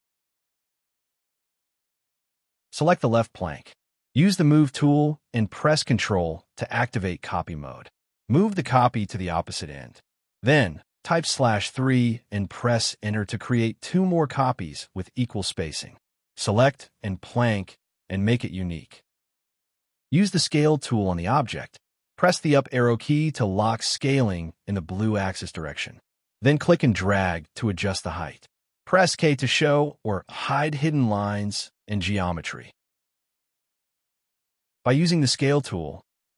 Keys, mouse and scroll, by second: 0.1 middle click, 3.8 scroll up 1, 3.9 m, 4.6 scroll up 1, 5.5 scroll up 1, 5.6-6.3 ctrl+scroll down 3, 6.3 shift+middle click, 6.7 shift+scroll up 1, 7.6 shift+click, 8.0-9.0 typing, 9.5 Delete, 9.7 scroll down 1, 10.7 middle click, 16.1 right click, 18.7-19.4 scroll up 2, 19.1 s, 20.0 k, 21.0 scroll down 1, 21.7 shift+middle click, 22.1 shift+scroll down 1, 22.7 scroll down 1, 23.0 shift+middle click, 23.7-24.0 scroll down 1, 26.2 space, 26.4 scroll down 1, 27.1 shift+middle click, 27.6 scroll up 1, 28.8 s, 28.9 scroll up 1, 29.7 scroll down 1, 30.1 shift+middle click, 30.7 scroll down 1, 31.7 k, 31.7 scroll down 1, 32.1 space, 32.6 middle click, 35.4 shift+middle click, 35.7 shift+scroll up 2.